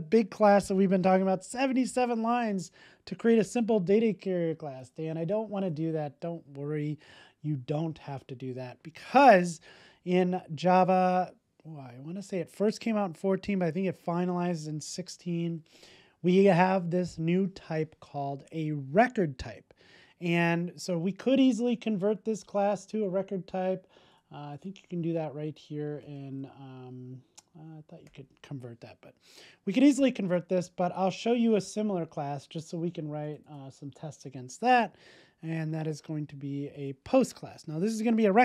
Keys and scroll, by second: 25.0 alt+Return.